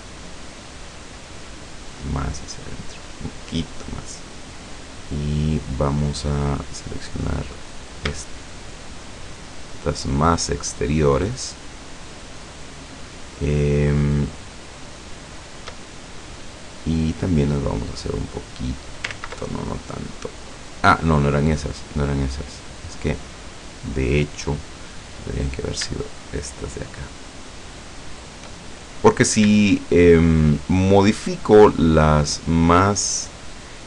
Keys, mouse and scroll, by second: 3.2 click, 4.2-6.2 middle drag, 7.7 middle click, 8.4 shift+middle click, 9.0 shift+middle click, 9.7 shift+middle click, 10.2 shift+right click, 10.9 shift+right click, 11.4 shift+right click, 12.5 shift+right click, 13.3 shift+right click, 13.8 shift+right click, 14.3 shift+right click, 15.3 shift+right click, 15.9 shift+middle click, 17.5-19.1 drag, 19.1 ctrl+z, 21.2 scroll up 2, 22.3 scroll down 2, 22.7-23.9 drag, 23.9 right click, 24.3 scroll down 1, 25.4 right click, 26.5 shift+right click, 27.1 shift+right click, 27.7 shift+right click, 28.2 shift+right click, 28.7 shift+middle click, 30.3 shift+right click, 31.0 shift+right click, 33.6 shift+right click.